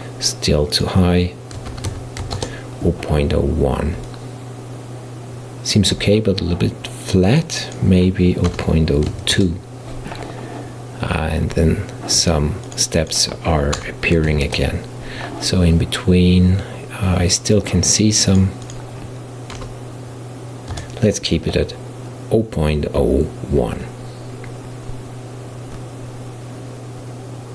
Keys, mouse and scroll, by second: 0.8-3.8 drag, 4.1-7.1 middle drag, 7.4-10.4 drag, 12.7-15.8 drag, 18.3-21.4 drag.